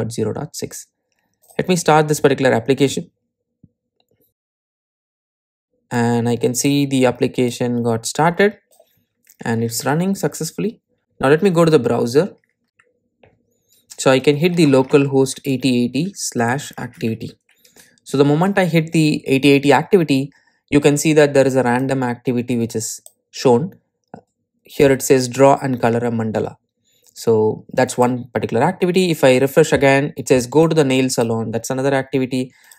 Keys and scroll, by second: 2.0 ctrl+r.